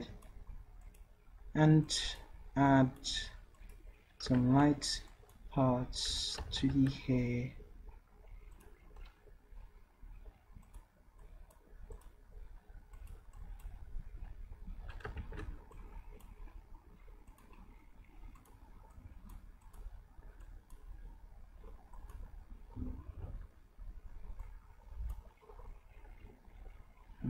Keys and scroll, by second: 4.4 ctrl+z, 6.4 ctrl+z, 6.6 ctrl+z, 15.2 ctrl+z, 23.3 d.